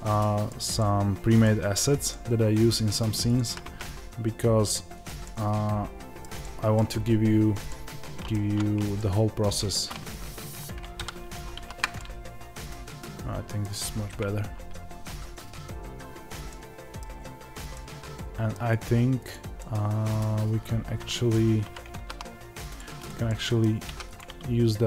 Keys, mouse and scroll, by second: 3.2 click, 4.9 click, 5.2-19.2 middle drag, 8.3 Tab, 10.9 KP_Divide, 14.0 KP_0, 17.1-17.7 scroll up 1, 19.2 click, 19.5-22.7 middle drag, 21.6 g, 22.7 click, 23.2-24.8 middle drag, 24.1 x.